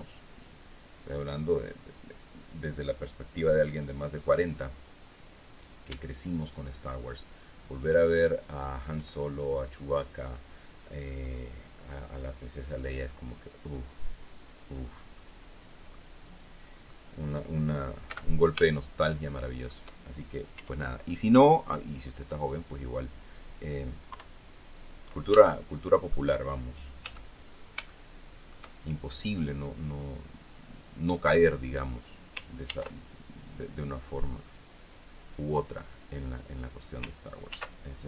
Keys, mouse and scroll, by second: 2.1 click, 4.6 click, 6.1 middle click, 7.0 shift+right click, 8.3 shift+right click, 15.7 middle click, 18.7 z, 19.3-20.4 shift+middle drag, 21.1 e, 23.2 click, 24.7 KP_3, 25.9-27.4 shift+middle drag, 27.6 z, 28.4 shift+middle click, 29.7-30.9 scroll up 2, 30.9-31.6 scroll up 1, 31.6-32.9 scroll up 1, 33.2 ctrl+r, 33.7 ctrl+click, 36.2 click.